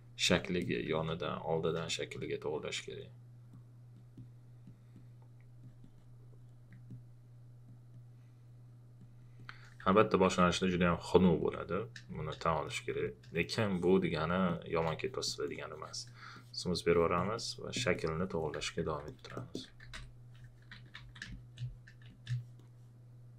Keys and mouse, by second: 1.8 space, 9.9 alt+click, 12.1 space, 13.0 space, 13.0 click, 19.6-22.0 typing, 21.3 click.